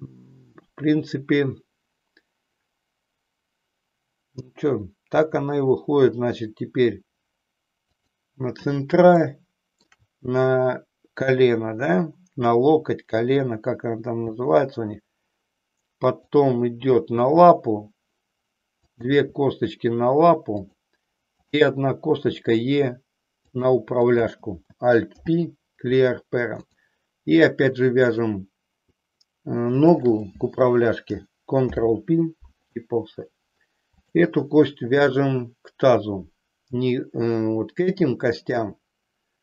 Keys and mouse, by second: 5.2 e, 9.2 shift+middle click, 14.3 e, 17.2 e, 18.9 click, 19.2 e, 21.4 click, 22.4 e, 23.5 click, 24.0 click, 25.3 alt+p, 29.8 shift+click, 31.5 ctrl+p, 34.0 click.